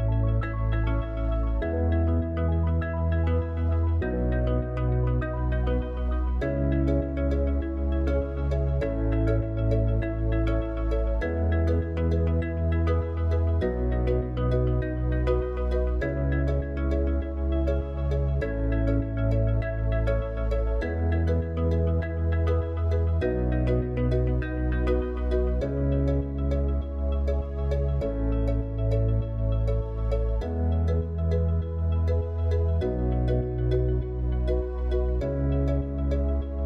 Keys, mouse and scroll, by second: 3.1 click, 4.4 click, 9.0 KP_0, 11.4 click, 14.3 click, 16.5-22.1 drag, 29.5-36.6 drag.